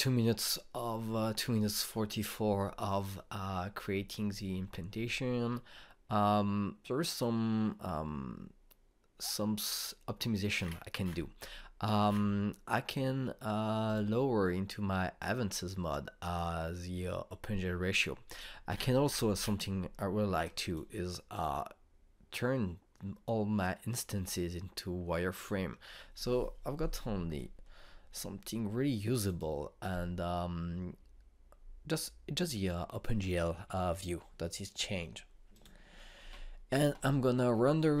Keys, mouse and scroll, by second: 8.0 click, 10.8 typing, 11.5-14.8 scroll down 1, 14.8 click, 19.2 click, 26.3 click, 28.3-33.3 alt+drag, 36.4 click.